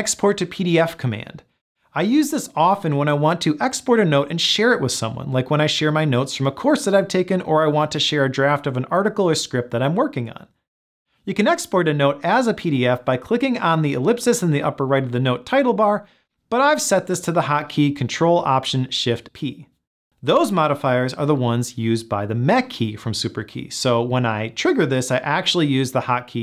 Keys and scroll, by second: 19.2 ctrl+alt+shift+p.